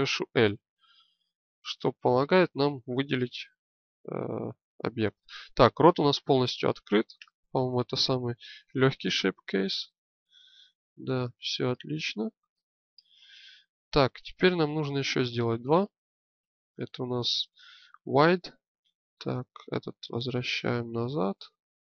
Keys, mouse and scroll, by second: 0.4-2.2 drag, 3.3-5.2 alt+middle drag, 7.1 Tab, 11.7-13.4 alt+middle drag, 15.5-18.8 drag, 18.8 middle click, 19.8-21.8 drag.